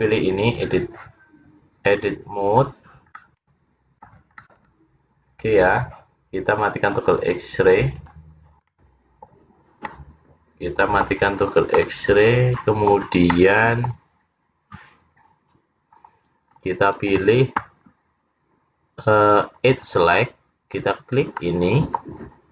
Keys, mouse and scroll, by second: 0.0 click, 2.1 click, 2.7-3.3 scroll up 1, 3.3 middle click, 3.3-3.9 scroll up 3, 4.5 middle click, 4.5 scroll up 1, 6.9 click, 8.0 click, 8.8 middle click, 9.9 middle click, 11.4-11.9 scroll up 3, 11.8 middle click, 13.4 middle click, 16.1-16.4 scroll up 2, 16.6 scroll down 3, 19.7 click, 20.8 click, 21.5 middle click.